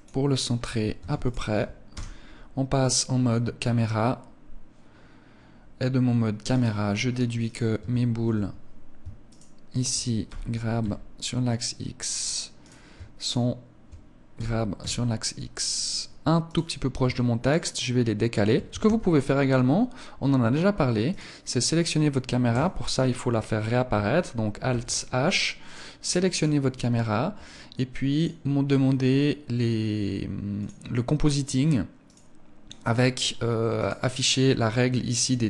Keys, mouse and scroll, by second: 0.4 ctrl+s, 1.3 KP_0, 6.0 right click, 7.0 right click, 8.8 shift+right click, 9.7 g, 11.6 click, 12.1 right click, 12.8 shift+right click, 13.8 g, 15.3 click, 16.0 right click, 16.9 shift+right click, 18.2 ctrl+s, 20.5 right click, 24.1 alt+h, 25.0 right click, 25.7 right click, 27.6 click, 31.6 right click, 33.1 right click.